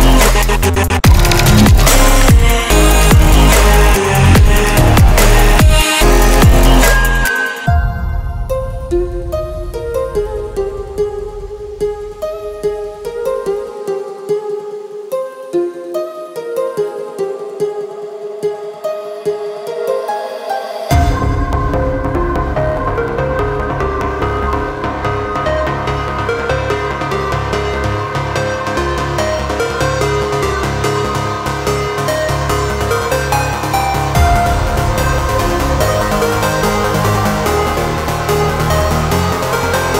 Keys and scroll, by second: 8.9 Delete.